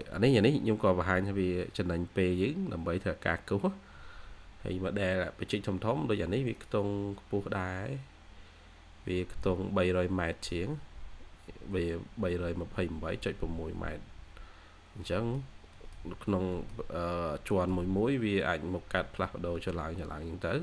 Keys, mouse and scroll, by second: 5.4 scroll down 1, 7.4-7.8 scroll up 1, 11.6 scroll down 1, 12.3-13.3 scroll up 1, 13.3 scroll down 1, 14.6 scroll down 1, 14.9 middle click, 16.2 scroll down 1, 16.4 middle click, 16.9-17.4 scroll up 1, 17.4 middle click, 17.6 scroll down 1, 18.3-18.7 scroll up 1, 18.7-19.3 scroll down 1, 19.3 scroll up 1.